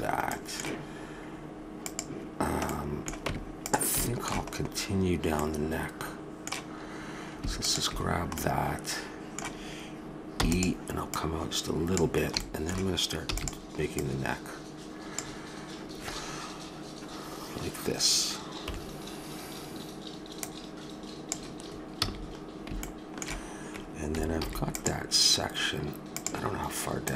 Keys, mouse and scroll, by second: 1.8-3.5 drag, 3.2 Tab, 7.6 click, 8.4-9.5 middle drag, 10.4 e, 11.1-12.4 drag, 12.4 middle click, 13.2 e, 13.9-15.6 drag, 18.6 KP_7, 20.3 click, 22.1 a, 22.8-24.4 middle drag, 24.4 ctrl+r, 24.5 middle click.